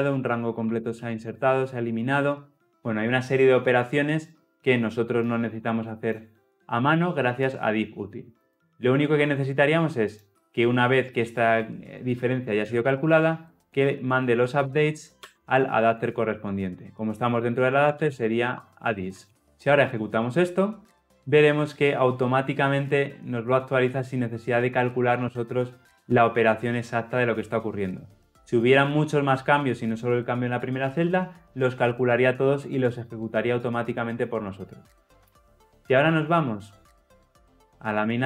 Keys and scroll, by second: 4.1 Escape, 18.5 Escape, 19.3 Escape, 19.3 ctrl+alt+l, 19.4 ctrl+alt+o, 20.2 shift+F10.